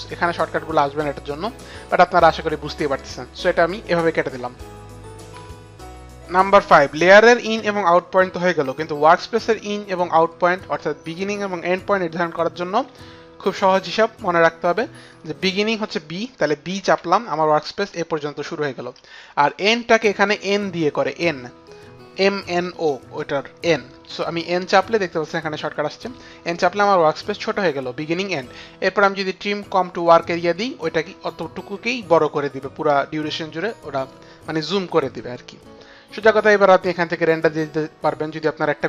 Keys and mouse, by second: 1.2 click, 13.9 click, 16.5 b, 19.9 click, 20.7 b, 20.8 click, 23.8 n, 28.7 right click, 32.9 click.